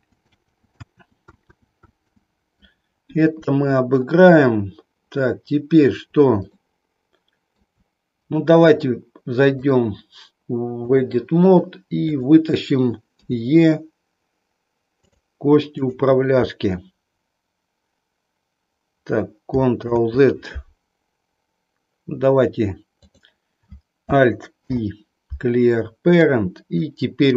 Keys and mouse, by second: 6.5-7.7 shift+middle drag, 9.7-11.0 drag, 12.0 click, 13.3 e, 15.8 click, 19.8 ctrl+z, 22.9 click, 24.5 alt+p, 26.8-27.3 drag.